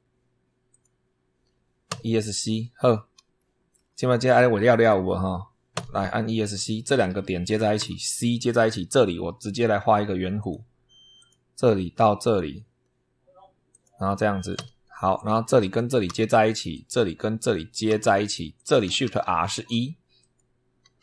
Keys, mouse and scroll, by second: 0.6 click, 1.8 Escape, 2.6-2.9 scroll up 2, 3.2 shift+middle click, 3.9 shift+scroll up 2, 5.6 Escape, 6.9 click, 7.6 c, 10.3 click, 11.0 click, 12.1 click, 13.6 click, 14.4 Escape, 15.0 click, 15.9 c, 16.6 click, 17.8 c, 18.4 click, 18.9 shift+r, 19.5 shift+1, 20.1 click.